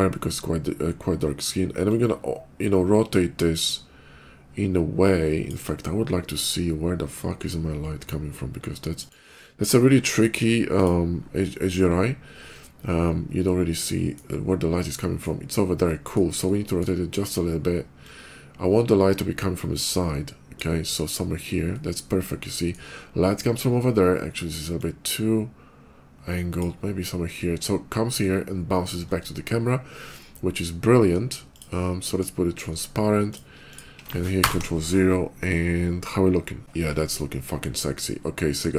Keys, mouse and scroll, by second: 1.8-5.3 drag, 7.0 middle click, 8.7 click, 8.7 middle click, 9.6 middle click, 10.5 click, 10.5 middle click, 12.8-14.0 middle drag, 14.7 middle click, 15.6 middle click, 16.2 middle click, 17.8-20.4 drag, 21.6 middle click, 24.6-26.4 drag, 31.3 click, 31.8 middle click, 33.1 click, 33.5 click.